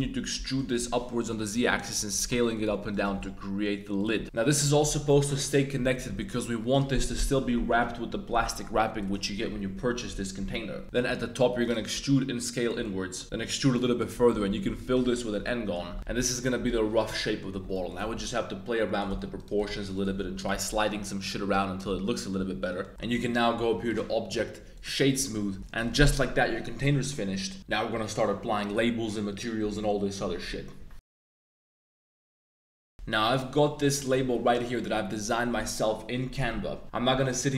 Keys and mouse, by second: 0.0-4.1 typing, 0.5 click, 1.2 click, 2.0 click, 2.5 shift+click, 2.9 right click, 4.0 click, 4.2 Tab, 10.8 shift+1, 10.9 shift+middle click, 11.3 e, 11.6 click, 11.9 s, 12.6 click, 12.8 middle click, 13.2 e, 13.4 s, 14.0 click, 14.3 f, 15.0 Tab, 15.4 drag, 16.0 alt+super+KP_Add, 17.2 click, 17.5 g, 17.7 z, 17.9 shift+click, 18.1 s, 18.9 shift+click, 19.2 alt+2, 19.3 alt+click, 19.6 g, 19.7 g, 20.2 g, 20.4 click, 20.5 Tab, 20.8-21.2 middle drag, 21.5 drag, 22.1 drag, 22.3 Tab, 22.6 click, 23.9 click.